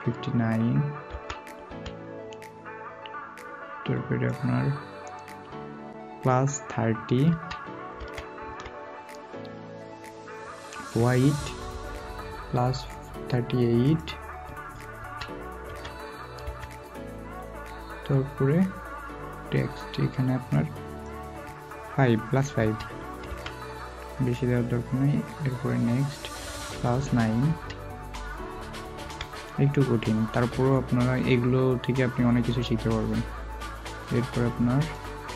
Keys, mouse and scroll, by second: 24.7 typing, 27.4 typing, 31.8-32.3 scroll down 1, 32.3 typing.